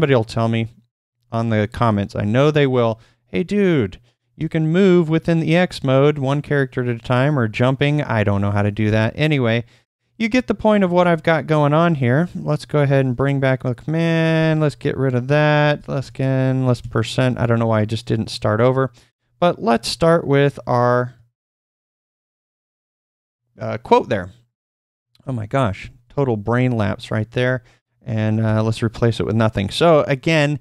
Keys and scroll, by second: 0.1 Right, 0.3 Right, 2.9 /, 4.1-4.8 typing, 8.8 Return, 10.8 typing, 12.9 ctrl+p, 14.3 ctrl+u, 15.7 ctrl+u, 19.1 /, 21.2 typing, 25.2-28.4 typing.